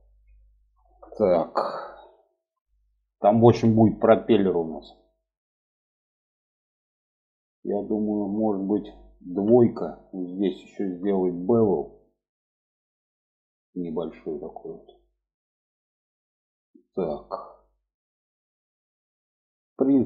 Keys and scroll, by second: 8.8 2.